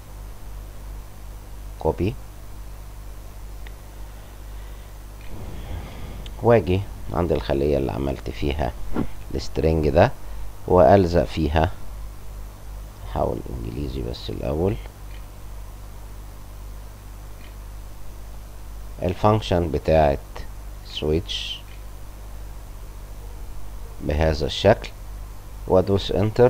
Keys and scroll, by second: 5.1 Escape, 12.2 Return, 14.0 End, 14.1 `, 14.2 Tab, 14.3 Caps_Lock, 17.3 shift+7, 21.6 ctrl+v, 25.9 Return.